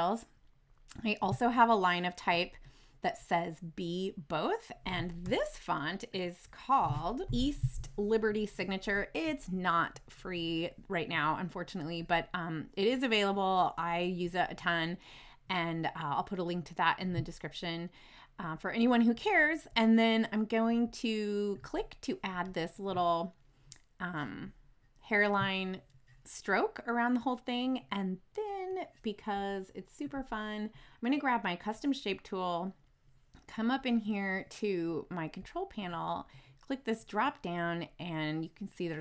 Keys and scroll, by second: 5.2 t, 7.2 ctrl+z.